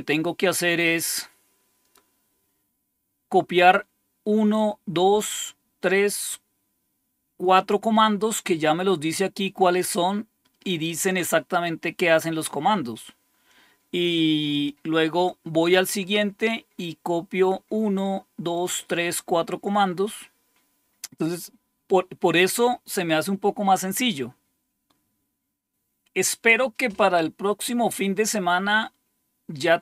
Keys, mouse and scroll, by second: 0.7 click, 2.7-3.3 scroll down 1, 3.3-4.1 scroll up 1, 4.9-5.7 scroll down 2, 6.2-6.9 scroll down 2, 12.3-12.9 scroll down 2, 12.9-13.3 scroll down 1, 14.4 click, 17.4-18.7 scroll down 1.